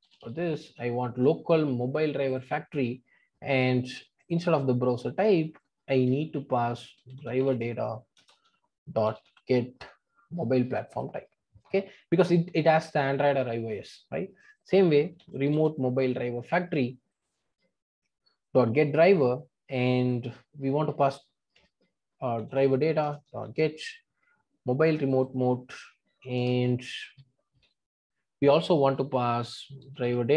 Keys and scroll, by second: 9.0 Return, 23.1 Return.